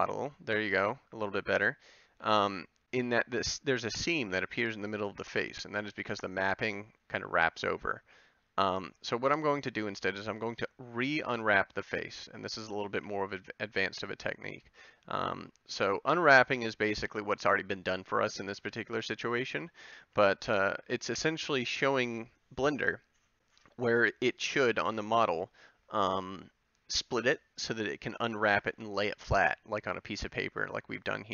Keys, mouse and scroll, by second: 12.9 b, 18.1 a, 18.6 b.